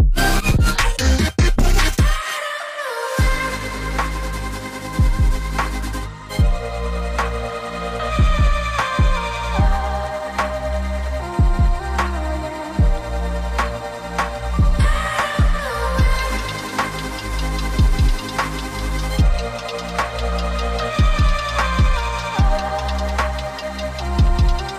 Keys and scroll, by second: 13.9 ctrl+shift+], 22.6 ctrl+z, 24.5 Escape.